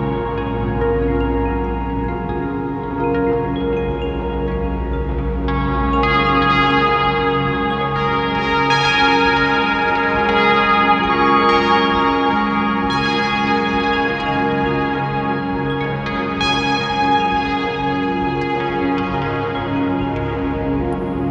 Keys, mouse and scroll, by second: 2.6 scroll down 1, 3.6 shift+click, 4.6 scroll down 1, 5.2 scroll down 1, 6.8 scroll down 1, 7.9 scroll down 1, 8.0 KP_0, 8.2 scroll up 1, 9.0 click, 9.9 scroll up 1, 11.0 shift+click, 12.6 click, 15.2 alt+a, 16.2 click, 16.6 alt+a, 18.2 scroll up 1, 20.2 click, 20.4 r, 20.9 right click, 21.2 r.